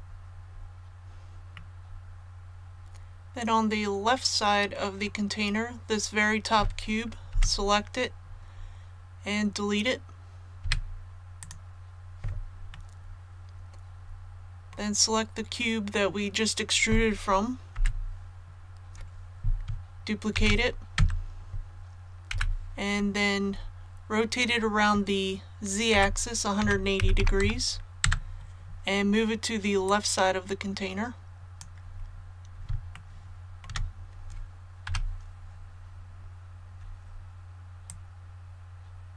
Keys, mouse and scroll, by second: 1.5-5.2 middle drag, 10.6 x, 11.4 click, 12.7-15.2 middle drag, 20.3 shift+d, 22.3 KP_1, 25.9-27.4 typing, 29.8-31.9 drag, 31.9 scroll up 1, 32.9 shift+middle click, 33.3 shift+scroll up 1, 34.8 KP_7, 36.1-36.4 scroll up 1, 37.8-39.1 drag.